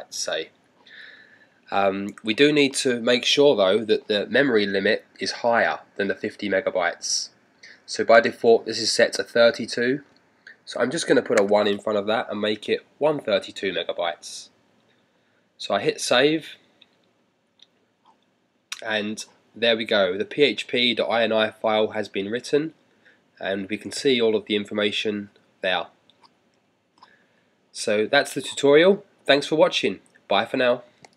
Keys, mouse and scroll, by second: 11.4 typing, 12.8 typing, 15.4 click.